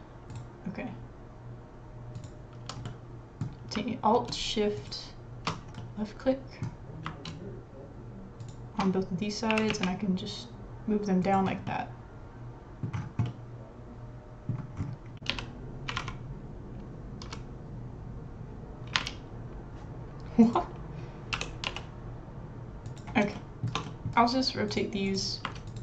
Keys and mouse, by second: 2.1 click, 2.8 middle click, 3.3 typing, 4.8 alt+shift+click, 5.8 middle click, 9.5 g, 11.7-12.9 middle drag, 13.2-14.3 middle drag, 15.1 r, 21.3 r, 23.4 shift+middle click, 23.8 middle click, 24.7 click, 25.7 alt+shift+click.